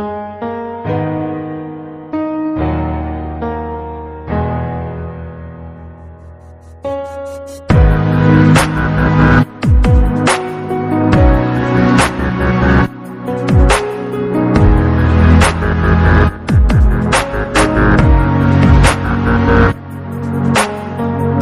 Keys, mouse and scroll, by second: 0.0 KP_1, 0.8-1.3 scroll up 1, 1.5 g, 3.7-4.0 scroll down 2, 4.0-4.4 scroll up 3, 4.6 scroll up 1, 4.8 click, 5.2-5.8 scroll up 1, 5.8 scroll up 1, 6.0 shift+click, 6.8-7.6 scroll down 2, 7.6-7.9 scroll down 1, 7.9-8.2 drag, 8.2-8.8 scroll down 7, 8.8-10.6 right drag, 10.6-11.5 scroll up 17, 11.5-12.5 right drag, 12.5-13.2 scroll down 14, 13.2 click, 15.9 BackSpace, 17.0 click, 17.4 KP_6, 17.5 KP_6, 17.6 KP_6, 18.1 drag, 18.7 click, 19.5 shift+click, 19.9 shift+drag, 20.9 drag.